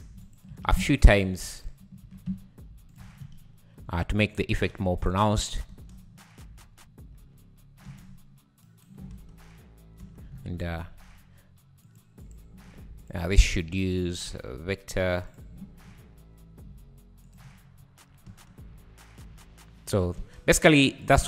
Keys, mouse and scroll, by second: 0.5 shift+d, 2.3 shift+d, 3.0 Tab, 3.5 scroll up 3, 3.8 `, 5.0-5.4 drag, 5.4 scroll up 2, 5.7 space, 6.6 scroll down 4, 6.9 `, 7.3 scroll up 2, 7.9 space, 8.7 shift+right click, 9.1 space, 10.0 space, 10.4-10.9 scroll down 11, 10.9 `, 11.9 click, 12.6 middle drag, 12.6 scroll up 4, 13.0-13.5 drag, 15.4 v, 15.9-16.3 scroll up 4, 16.3 `, 16.6-17.8 scroll up 3, 17.3-17.6 drag, 17.8 `, 18.3 space, 20.2 space.